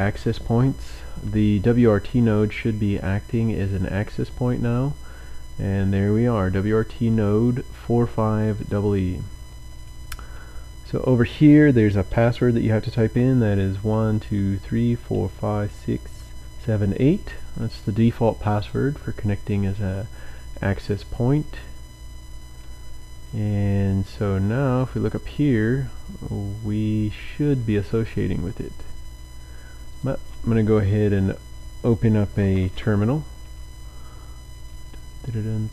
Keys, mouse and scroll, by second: 3.8 click, 8.6 click, 13.2-16.8 typing, 18.7 click, 25.2 click, 30.0 click, 32.8 ctrl+alt+t.